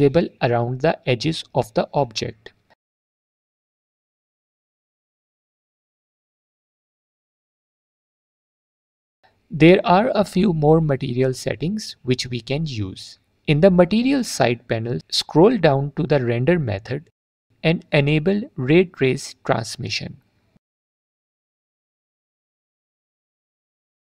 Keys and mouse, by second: 3.1-4.8 drag, 5.1-6.5 drag, 6.8 alt+drag, 8.5 click, 10.4 middle click, 13.7 middle click, 23.0-24.0 drag.